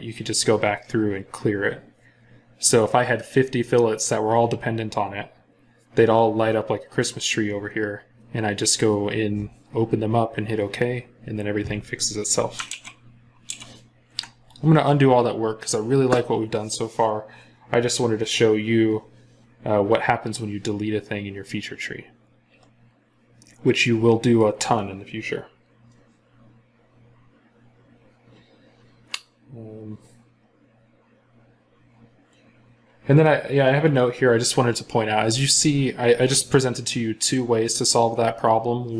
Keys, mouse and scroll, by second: 12.5 ctrl+z, 13.3 ctrl+z, 19.4 scroll down 1.